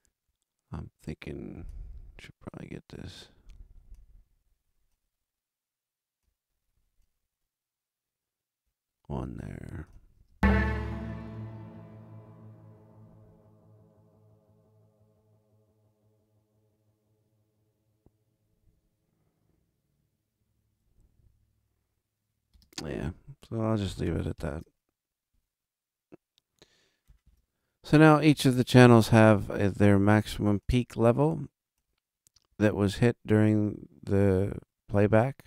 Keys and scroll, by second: 10.1 space, 20.9 alt+a, 24.3 ctrl+alt+super+Up, 27.2 super+=.